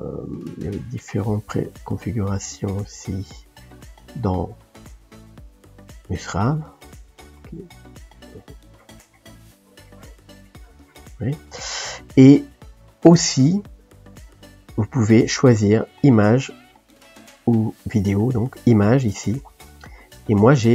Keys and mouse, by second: 11.2-13.4 middle drag, 13.4-17.0 drag, 20.4 click.